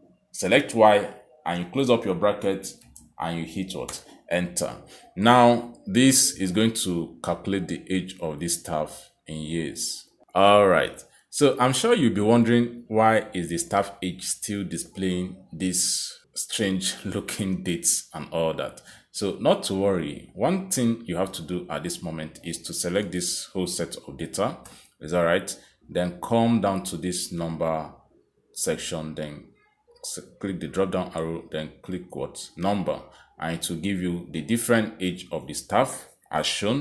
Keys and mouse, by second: 1.6 shift+', 3.9 shift+0, 4.9 Return, 7.3 click, 13.9 click, 15.1 click, 15.8 click, 17.4 click, 18.3 click, 19.4 click, 20.6 click, 22.3 click, 25.8 ctrl+shift+Down, 29.2 click, 32.8 click.